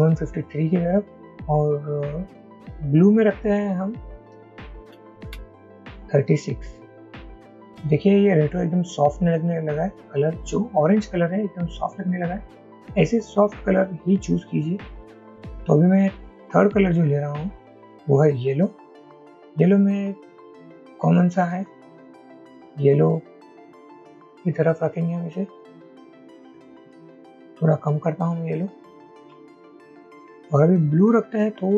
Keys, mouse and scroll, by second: 4.3 shift+Up, 4.4 shift+Up, 4.7 shift+Up, 5.2 shift+Up, 5.4 shift+Down, 26.5 Down.